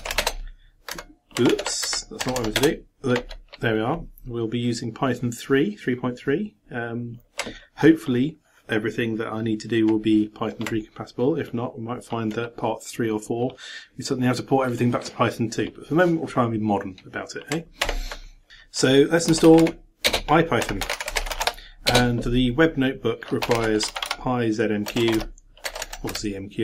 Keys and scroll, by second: 1.5 ctrl+d, 1.8 ctrl+Up, 2.2 ctrl+BackSpace, 2.6 ctrl+Return, 17.8 ctrl+d.